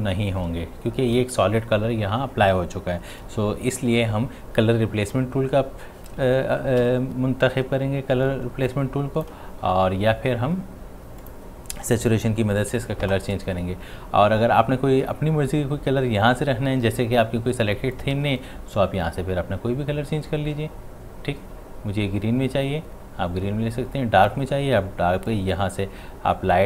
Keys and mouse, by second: 3.2 ctrl+z, 6.8 ctrl+z, 6.8 x, 8.7-11.2 drag, 12.5 ctrl+u, 18.0-26.6 drag.